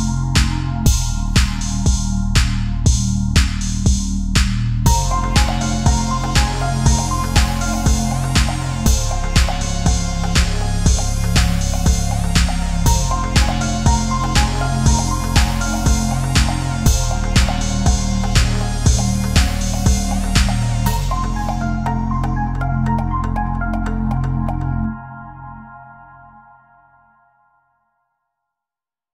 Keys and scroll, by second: 0.3 Down, 0.5 Left, 0.8 ctrl+a, 1.4 Up, 1.7 ctrl+a, 2.7 Left, 2.8 Right, 2.9 Left, 3.0 ctrl+a, 3.5 space, 4.4 ctrl+-, 4.8 space, 10.6 Delete, 10.9 Delete, 13.2 Delete, 13.4 Delete, 14.0 Delete, 14.4 Delete, 14.7 Delete, 14.9 ctrl+=, 15.0 space, 17.6 ctrl+0, 17.7 ctrl+a, 19.8 Right, 20.8 Right, 21.0 Up, 21.3 Right, 22.0 Delete, 22.2 ctrl+a, 22.8 Delete, 22.9 ctrl+z, 23.1 Delete, 23.4 Delete, 23.7 Delete, 24.6 Delete, 25.3 ctrl+z.